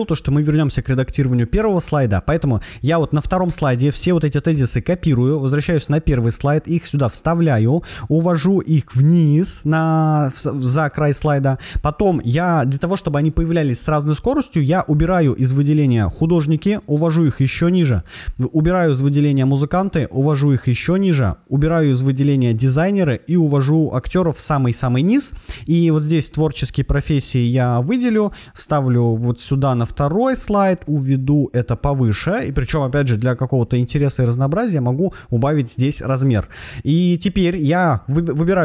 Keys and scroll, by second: 4.4 super+c, 6.5 super+v, 27.5 super+c, 28.9 super+v, 32.6 super+a.